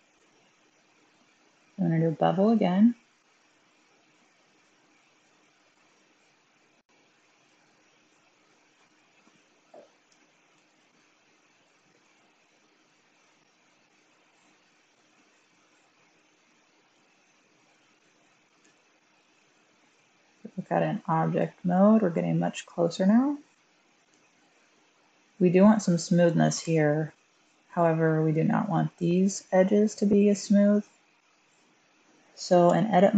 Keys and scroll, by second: 0.1 typing, 6.8 1, 10.5 1, 18.6 Tab, 24.0 1, 32.0 typing, 32.5 Tab.